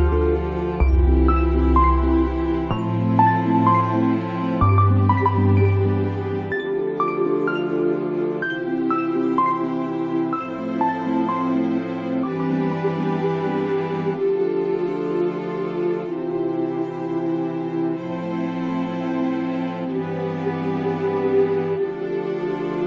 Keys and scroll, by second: 16.5 ctrl+z.